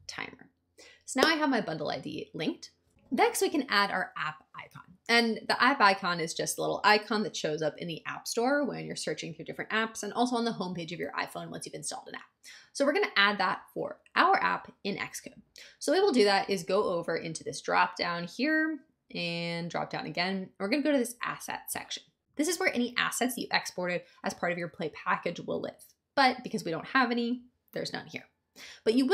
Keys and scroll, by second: 0.0-0.1 typing.